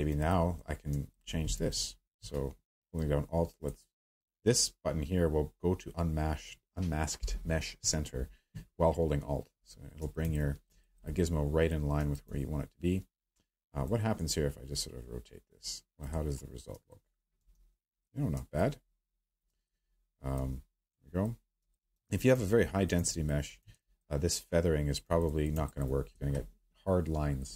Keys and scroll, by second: 1.5 w, 17.5 ctrl+z.